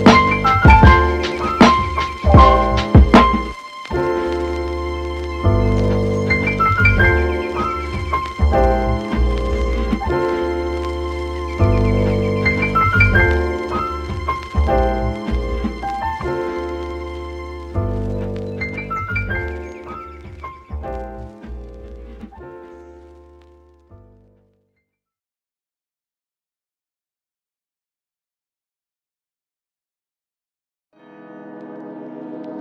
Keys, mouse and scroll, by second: 0.2 click, 0.3 Delete, 3.5-15.9 drag, 19.0-19.8 middle drag, 20.0 click, 23.8-29.6 drag.